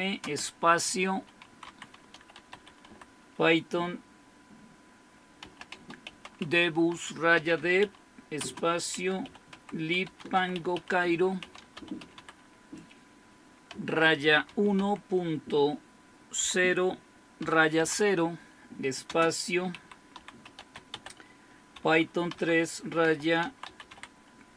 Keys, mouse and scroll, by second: 0.2-3.3 typing, 5.2-12.7 typing, 13.7-14.8 typing, 16.4 typing, 17.4-17.8 typing, 19.0-24.5 typing.